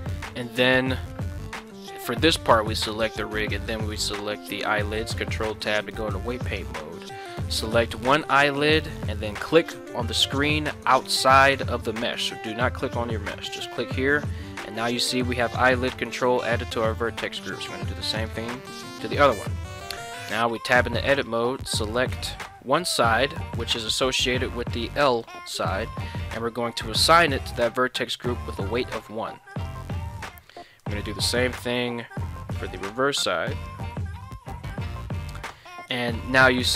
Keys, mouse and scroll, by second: 1.7 right click, 3.4 shift+right click, 4.7 ctrl+Tab, 6.5 right click, 13.3 click, 17.7 right click, 18.2 click, 20.3 Tab, 21.1 right click, 22.3 ctrl+l, 25.2 click, 29.6 click, 30.8 right click, 31.5 ctrl+l, 32.7 click, 33.5 click, 34.5 Tab, 35.5 ctrl+Tab.